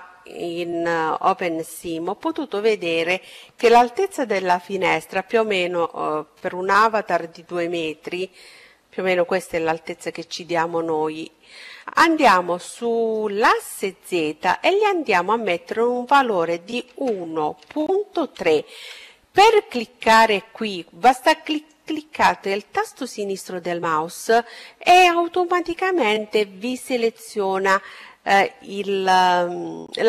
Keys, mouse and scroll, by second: 7.6-9.5 drag, 19.4-21.3 drag.